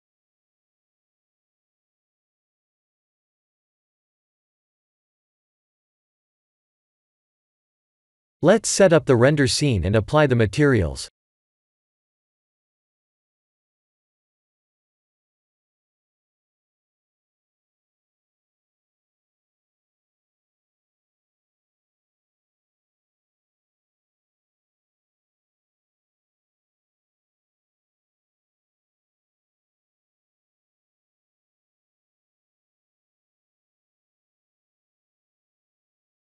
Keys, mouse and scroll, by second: 1.7 scroll down 4, 2.6 click, 5.7 click, 6.0 click, 7.2 click, 8.6 click, 9.5 click, 10.5 click, 13.7 click, 15.5 click, 17.5 click, 19.4 click, 19.9 click, 21.3 click, 22.1 click, 25.5 click, 28.6 click, 32.5 click, 32.9 middle click, 33.5 middle click, 34.0 click, 34.5 right click, 36.0 click.